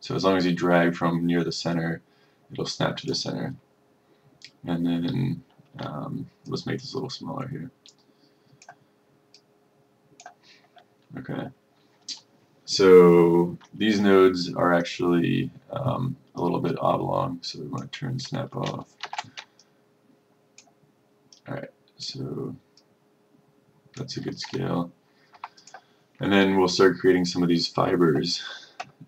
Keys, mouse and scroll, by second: 19.1 shift+5, 19.7-25.0 drag, 25.5 F1, 25.7 click.